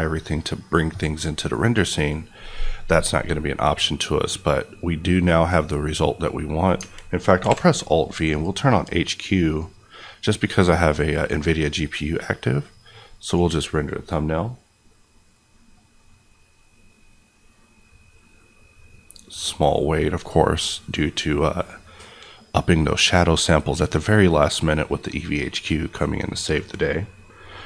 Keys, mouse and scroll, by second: 1.9 click, 7.4 alt+v, 8.3 click.